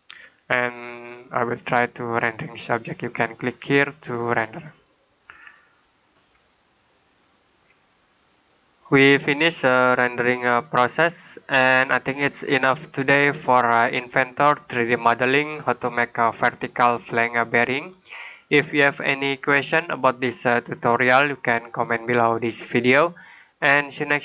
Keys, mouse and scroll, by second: 0.6 click, 4.2 click.